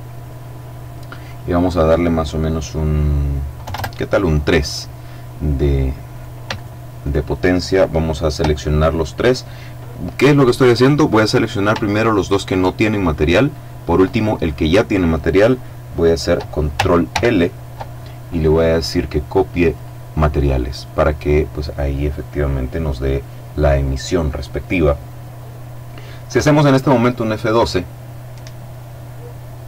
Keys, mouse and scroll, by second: 0.7 click, 3.1 KP_3, 3.2 KP_Enter, 5.5-7.1 right drag, 10.6 right click, 11.3 shift+right click, 13.4 right click, 16.5 ctrl+l, 19.2 click, 25.9 F12.